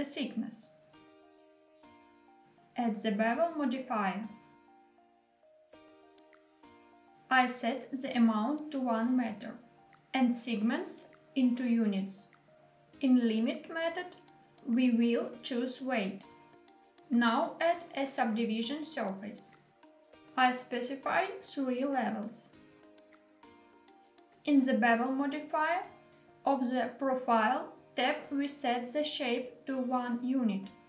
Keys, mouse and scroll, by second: 1.3 click, 1.9 middle click, 3.1 click, 4.5-6.5 drag, 7.4-9.3 drag, 9.8-11.5 drag, 12.2-13.9 drag, 17.1 click, 17.8-19.6 drag, 21.0 click, 21.6 click, 25.5 click, 26.4 click, 27.7 click, 29.2-30.5 drag.